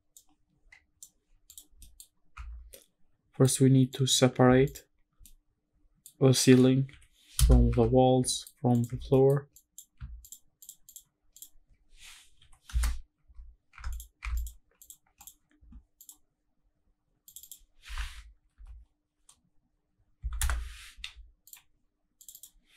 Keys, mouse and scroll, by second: 1.5 click, 1.8 middle drag, 2.2 scroll down 1, 2.3 Tab, 2.7 middle click, 3.5 scroll up 1, 3.9 click, 4.7 shift+click, 5.2 middle click, 6.9 p, 7.7 Tab, 8.3 middle click, 8.7 click, 9.0 Tab, 9.1 middle click, 9.5 click, 10.2 shift+click, 10.6 shift+click, 10.9 shift+click, 11.3 shift+click, 12.4 p, 13.2 Tab, 13.7 Tab, 13.9 click, 14.2 Tab, 14.3 click, 14.8 click, 15.2 click, 16.0 click, 17.3 click, 17.4-20.4 drag, 18.5 l, 21.5 click, 22.2-22.7 drag.